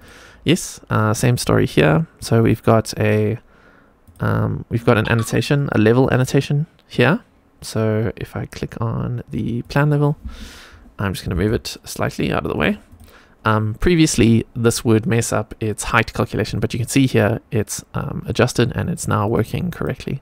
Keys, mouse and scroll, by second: 0.8 click, 1.6 click, 2.3 click, 4.0 click, 5.6 click, 9.5 click, 11.1 g, 12.8 click, 19.2 click, 19.7 click.